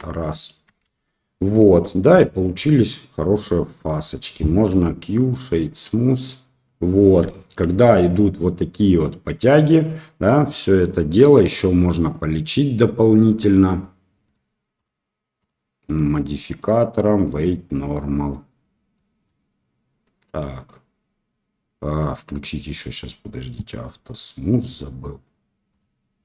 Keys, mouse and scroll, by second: 0.2 middle click, 0.8 shift+z, 1.1 middle click, 1.6 Tab, 1.9 middle drag, 2.6 click, 2.7 middle click, 4.6 q, 5.8 middle click, 6.4 middle click, 7.3 shift+middle click, 7.4 shift+q, 7.7 middle click, 9.0 middle click, 12.0 click, 14.3 click, 14.7 click, 15.3 click, 15.9-17.5 drag, 18.9-19.2 middle drag, 24.5 click, 25.7 click.